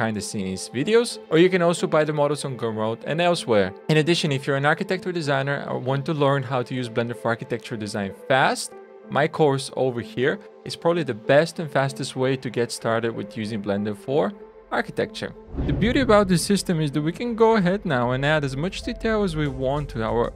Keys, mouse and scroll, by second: 15.7 scroll up 3.